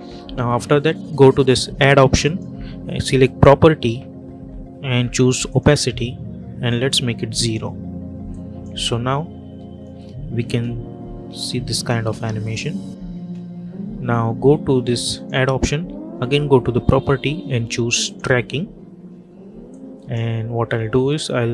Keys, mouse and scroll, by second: 2.1 click, 5.3-8.2 drag, 8.6 space, 11.3 click, 12.0 space, 15.0 click, 17.9-21.5 drag.